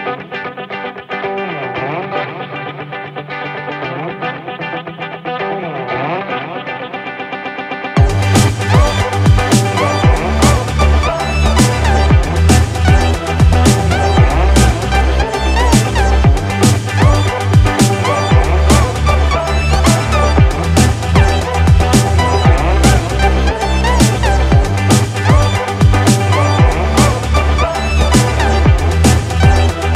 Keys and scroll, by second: 4.3 ctrl+-, 4.7 ctrl+z, 8.3 ctrl+alt+z, 12.4 ctrl+=, 16.5 ctrl+-, 17.0 ctrl+0, 19.3 ctrl+=, 20.1 ctrl+0.